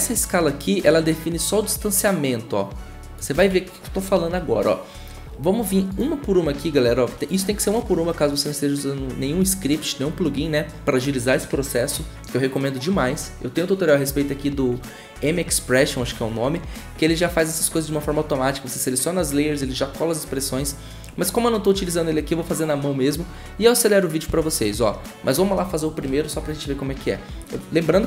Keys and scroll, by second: 3.3 ctrl+z, 24.2 s.